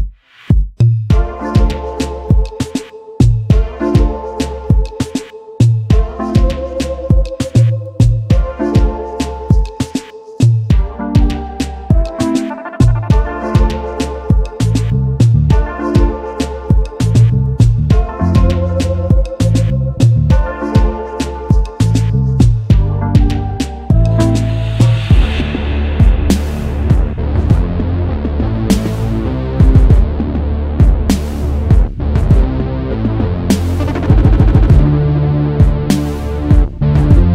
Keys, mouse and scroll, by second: 1.3 double click, 2.9-3.6 alt+scroll down 1, 3.8 space, 3.9 double click, 5.6 typing, 7.1 alt+click, 11.5 alt+scroll down 1, 12.9 alt+click, 13.0 double click, 17.0 alt+scroll up 1, 20.7 alt+scroll down 1, 20.8 alt+scroll up 1, 23.0 space, 23.1 double click, 24.0 space, 25.6 space, 25.6 double click, 30.9 shift+click, 32.1 typing, 36.2-36.9 typing.